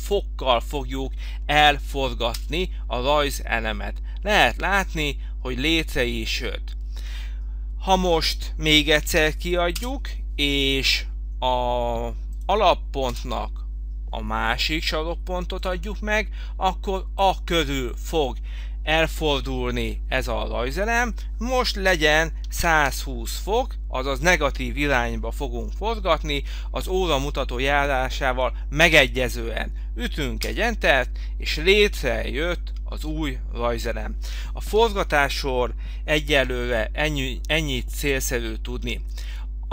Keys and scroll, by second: 2.4 Return, 8.8 f, 9.8 Return, 13.4 Return, 22.6 -, 25.9 -, 30.5 Return.